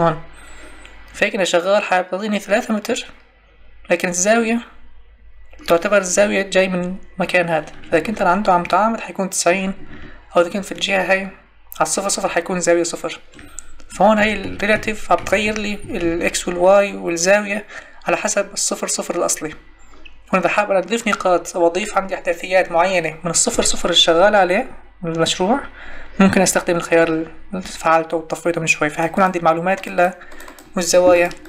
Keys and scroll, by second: 14.2 Tab.